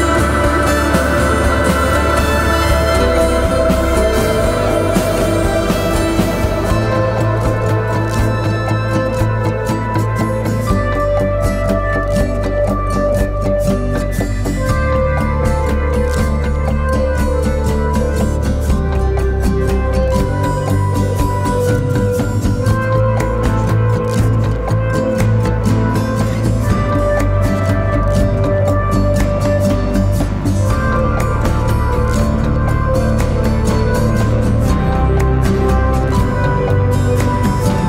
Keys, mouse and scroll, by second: 0.2-2.5 scroll up 1, 17.1 e.